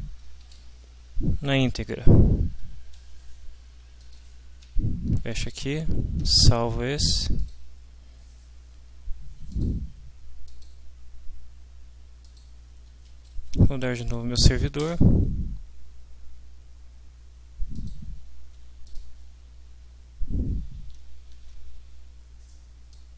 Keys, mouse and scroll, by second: 0.2 Down, 4.1 ctrl+click, 4.6 ctrl+c, 5.4 ctrl+click, 6.2 ctrl+s, 7.4 click, 9.7 click, 10.5 click, 12.4 click, 13.1 Up, 14.9 Return, 17.9 click, 18.8-19.3 drag, 20.8 alt+Tab, 22.9 click.